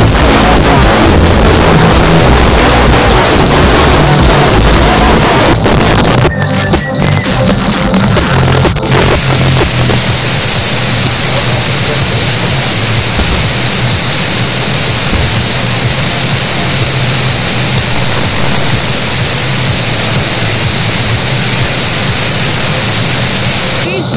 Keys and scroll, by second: 5.2 Page_Down.